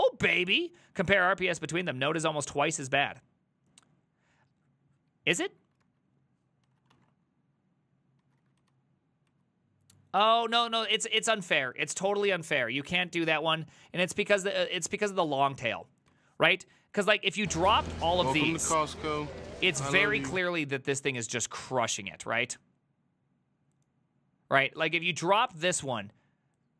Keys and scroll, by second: 5.9 alt+{, 6.7 ctrl+a, 7.0 ctrl+a, 8.3 ctrl+a, 8.4 [, 8.6 ctrl+u, 9.3 ctrl+u, 10.5 ctrl+u, 11.0 ctrl+u, 14.0-15.3 typing, 16.1 ctrl+u.